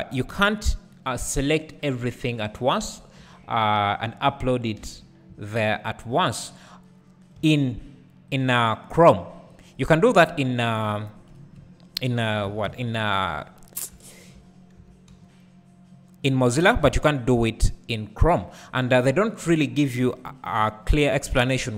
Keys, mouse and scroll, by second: 1.7-5.7 drag, 2.7-3.2 scroll up 1, 3.2 Tab, 4.8 3, 7.4 shift+d, 8.9 right click, 9.5-13.7 drag, 11.4 KP_Decimal, 12.5 s, 14.8 s, 16.5 click, 18.4-21.7 drag, 20.3 KP_Decimal, 21.1 `.